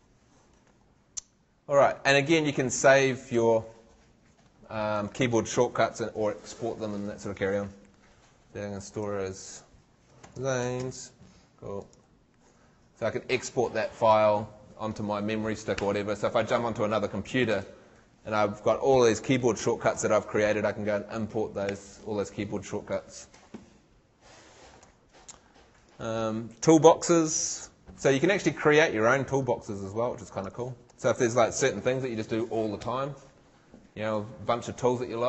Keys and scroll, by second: 10.0-11.3 typing.